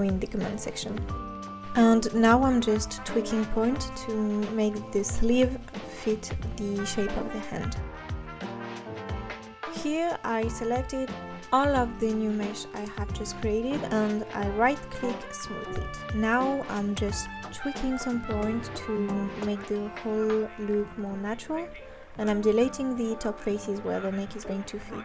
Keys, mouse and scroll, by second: 0.0 s, 0.9 middle click, 1.3 KP_1, 1.5 Tab, 1.7 scroll up 2, 1.8 scroll down 2, 2.0 click, 2.2 click, 2.3 scroll down 1, 2.5 Tab, 3.0 click, 3.3 s, 3.4 g, 4.1 click, 4.2 s, 4.7 click, 4.9 Tab, 5.1 click, 5.3 Tab, 5.7 f, 5.8 g, 6.2 click, 6.8 click, 6.9 g, 7.1 click, 7.2 g, 7.6 Tab, 7.8 KP_3, 8.0 KP_1, 8.1 scroll up 3, 8.2 Tab, 8.4 click.